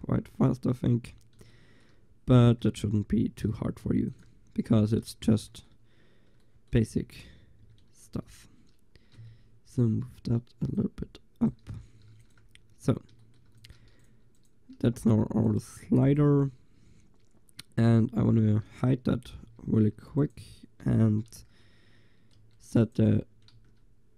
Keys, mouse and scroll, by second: 4.1 ctrl+s, 7.7 Tab, 8.1 a, 9.2 l, 11.7 Tab, 11.9 click, 12.2 ctrl+s, 12.8 a, 13.6 ctrl+s, 14.9 g, 15.3-15.7 drag, 15.7-18.1 right drag, 19.5 h, 19.9-20.3 right drag, 20.3-21.1 drag, 21.1-21.6 middle drag, 22.0 click, 22.1 middle click, 22.5 Tab, 23.6 shift+s.